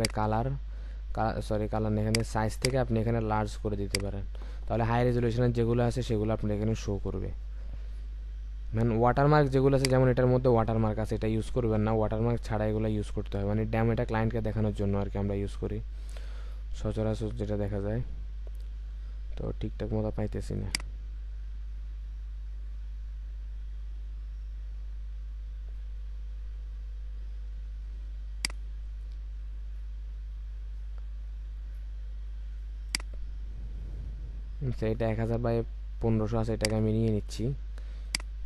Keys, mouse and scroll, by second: 2.5 double click, 9.1 scroll down 1, 16.5-17.9 scroll up 1, 21.8-22.5 scroll down 1, 27.4-28.5 scroll down 1, 31.7 scroll up 1.